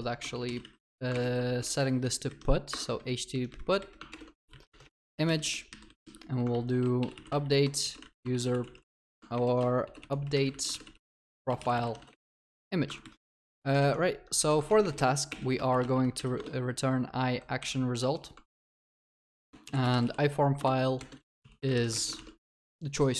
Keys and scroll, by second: 1.1 ctrl+BackSpace, 4.1 Return, 5.0 ctrl+BackSpace, 6.5 ctrl+w, 12.3 ctrl+s, 14.7 ctrl+BackSpace, 16.3 ctrl+BackSpace, 18.4 Return, 20.5 ctrl+BackSpace, 22.1 ctrl+s.